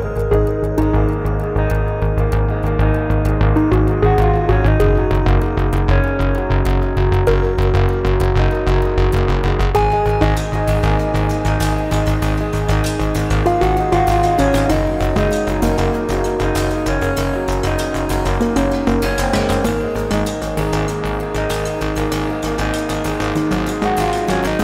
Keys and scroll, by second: 2.4 x.